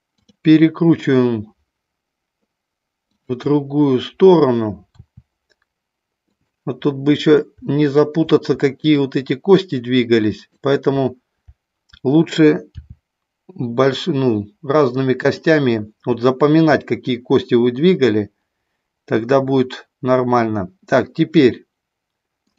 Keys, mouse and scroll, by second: 3.2 shift+click, 4.9 r, 8.8 shift+click, 10.3 shift+click, 12.7 r, 15.3 click.